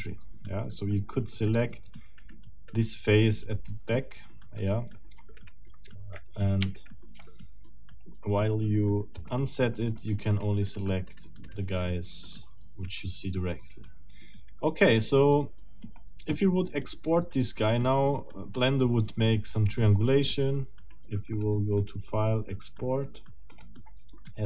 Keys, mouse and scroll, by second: 1.5 middle click, 2.2 middle click, 2.7 middle click, 3.2 click, 4.6 click, 5.4 middle click, 6.7 shift+middle click, 9.1 click, 9.7 middle click, 10.3 right click, 11.1 right click, 11.5 right click, 11.9 right click, 12.2-15.0 middle drag, 15.1-16.1 middle drag, 17.3 scroll down 2, 21.3 click, 23.5 click.